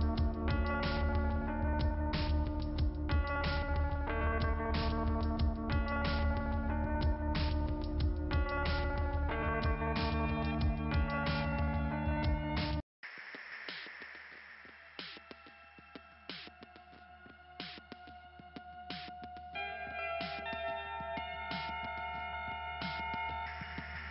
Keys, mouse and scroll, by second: 15.7-16.3 scroll down 2, 16.3 click, 17.2 click, 18.2 click, 18.3 click, 20.1 click, 20.2 right click, 20.3 click, 20.9 click, 21.2 click.